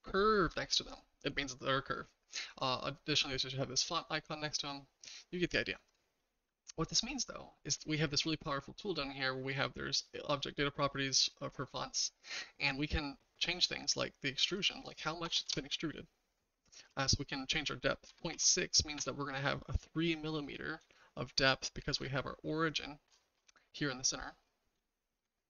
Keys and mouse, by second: 5.9 click, 14.6-19.6 drag, 20.9-22.0 shift+middle drag, 22.7 click, 24.8-25.2 shift+middle drag.